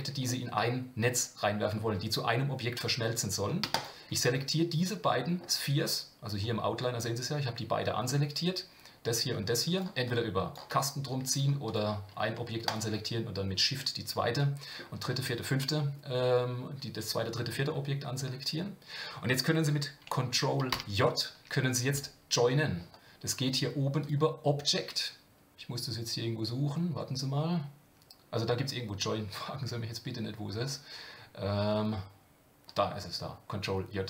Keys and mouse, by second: 0.2-1.7 middle drag, 4.3-5.4 middle drag, 10.0-10.6 drag, 11.7 click, 12.7-13.1 shift+drag, 14.3-14.8 middle drag, 20.7 ctrl+j, 24.0-34.0 drag.